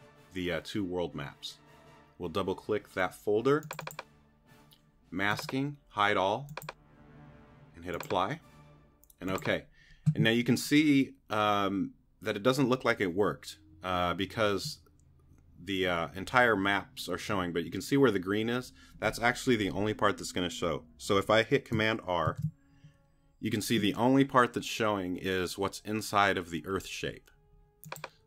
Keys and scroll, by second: 22.3 super+r.